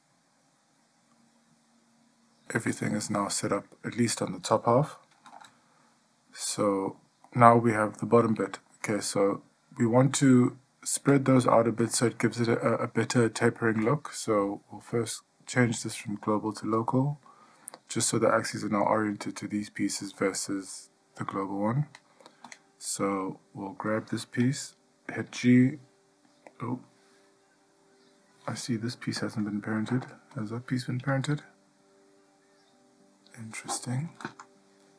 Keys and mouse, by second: 6.7-7.1 shift+middle drag, 7.5-8.2 middle drag, 8.5-8.9 shift+middle drag, 15.2-17.6 drag, 25.5 g, 31.5 g.